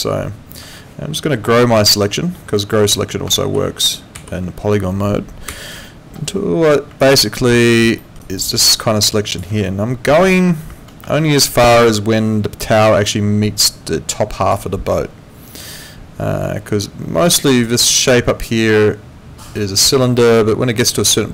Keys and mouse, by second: 0.0 alt+click, 3.4 shift+., 5.5 shift+., 7.0 alt+click, 8.0 alt+middle click, 8.2 alt+right click, 8.6 alt+click, 11.0 ctrl+2.